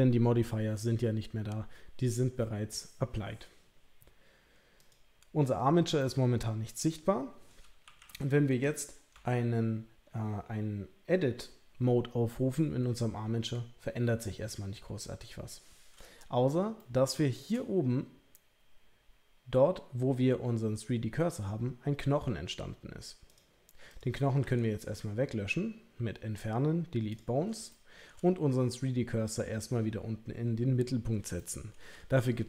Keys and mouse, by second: 4.8 click, 6.0-7.5 middle drag, 7.8 KP_3, 8.0 KP_1, 9.1 Tab, 16.8 shift+middle click, 23.3 click, 23.9 click, 24.4 Delete, 27.7 shift+middle click, 31.5 shift+middle click.